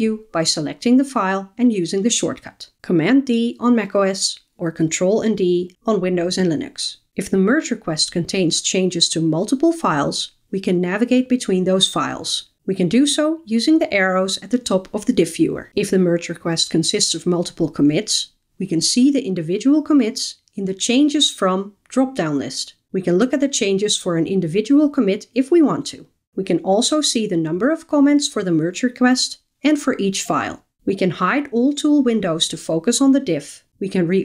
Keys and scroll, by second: 3.1 super+d, 31.5 shift+super+F12, 33.9 shift+super+F12.